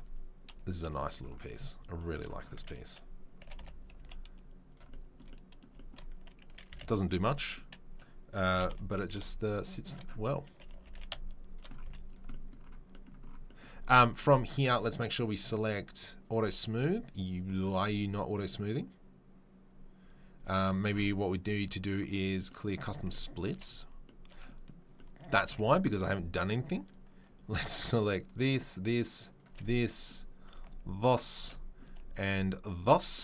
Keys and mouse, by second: 0.4 KP_3, 0.8 KP_1, 3.4 g, 5.7 shift+middle drag, 6.7 s, 8.5 g, 9.2 shift+middle click, 10.7 g, 11.1-13.7 shift+middle drag, 11.8 z, 13.7 click, 13.8-16.2 middle drag, 16.2 click, 16.3 middle click, 16.7 click, 16.8-20.0 middle drag, 20.0 click, 20.4 right click, 20.4-22.0 middle drag, 22.0 right click, 22.9-27.5 middle drag, 23.4 Tab, 25.4 Tab, 29.5-30.7 middle drag, 31.4 shift+middle click, 32.8-33.2 middle drag.